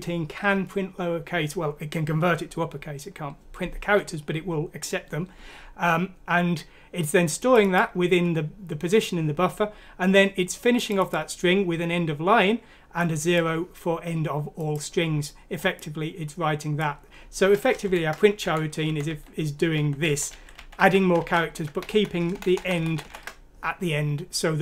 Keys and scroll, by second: 17.8 Left, 18.4 Left, 18.9 Left, 19.1-20.8 typing, 21.2 ctrl+z, 21.6 Right, 22.3 Right, 22.5 Right, 22.6 Right.